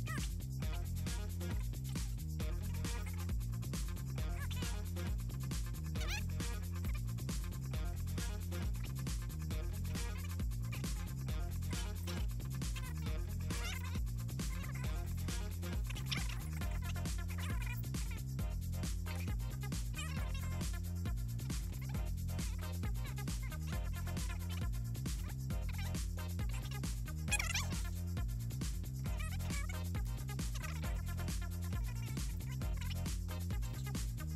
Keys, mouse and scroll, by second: 0.0-0.4 typing, 1.0 right click, 2.4 ctrl+c, 2.7 click, 3.0 click, 3.5 click, 4.3 click, 4.7 click, 5.8 n, 6.2 l, 7.4 click, 7.5 click, 8.0 click, 8.4 click, 8.8 click, 9.6 ctrl+x, 9.9 ctrl+z, 10.2 click, 10.9 click, 11.6 click, 13.7 click, 14.2 click, 14.4 shift+click, 15.2 click, 16.4 click, 16.9 ctrl+click, 18.6 Down, 19.1 ctrl+c, 19.1 ctrl+v, 19.3 Down, 19.6 Right, 20.6 click, 21.9 drag, 22.4 Up, 24.4 click, 24.8 ctrl+z, 24.9 middle click, 25.0 click, 25.6 ctrl+c, 25.6 ctrl+v, 25.8 Right, 27.4 click, 28.1 click, 28.8 click, 29.6 click, 29.8 click, 30.9 click, 31.7 click, 33.0 click, 33.4 click, 33.9 click.